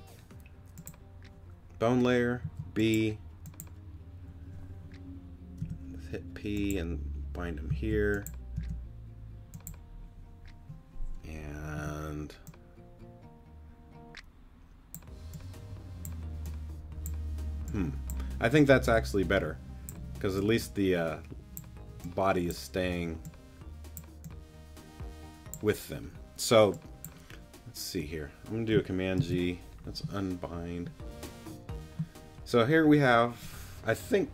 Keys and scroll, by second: 2.4 b, 5.6 p, 7.7 b, 8.5 p, 11.7 z, 19.8 z, 29.2 super+g.